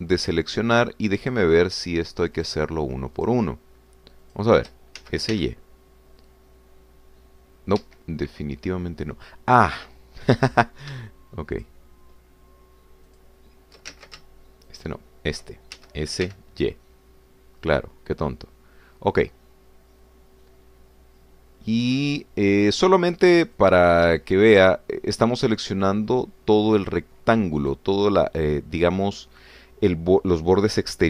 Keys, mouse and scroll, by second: 0.7 a, 1.3 scroll up 2, 2.4 shift+click, 3.4 shift+click, 4.2 shift+click, 5.2 shift+click, 6.0 shift+s, 6.5 shift+y, 8.8 Escape, 12.6 shift+click, 14.1 shift+click, 15.2 ctrl+shift+z, 15.7 shift+click, 16.8 shift+s, 17.3 shift+y, 23.2 click, 24.7 click, 25.7 shift+click, 26.6 shift+click, 27.8 shift+click, 28.6 shift+click, 30.0 shift+click.